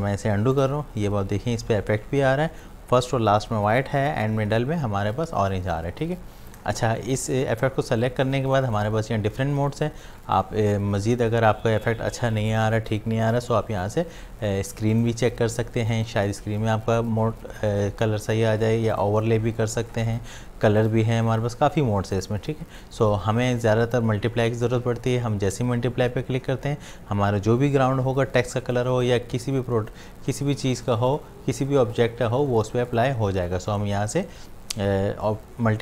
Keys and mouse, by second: 0.6 click, 6.5 click, 8.8 click, 14.9 click, 18.9 click, 32.9 click.